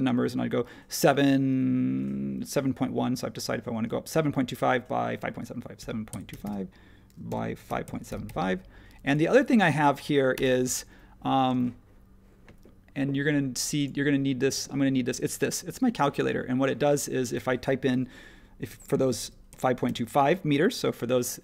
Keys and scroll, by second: 5.7-8.7 typing, 11.5 space, 19.2-20.4 typing.